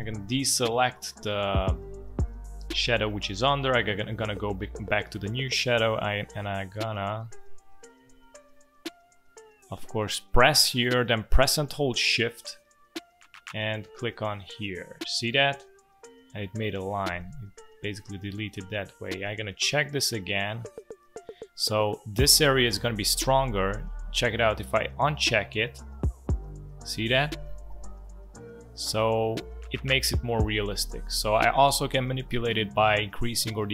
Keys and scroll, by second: 8.1 ctrl+z, 17.1 v.